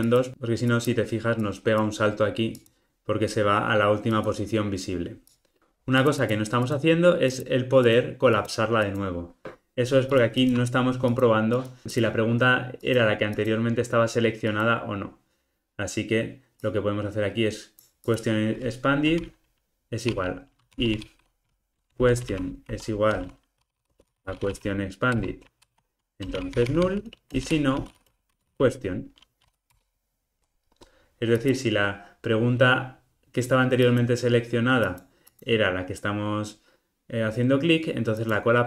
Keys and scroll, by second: 25.2 Return, 29.8 Return.